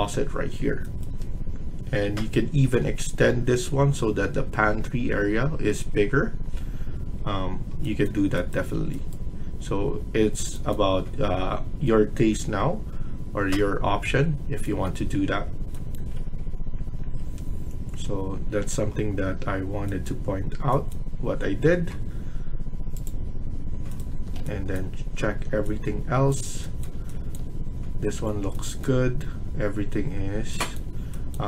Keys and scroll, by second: 1.6 Escape, 8.7 Escape, 24.1 Escape.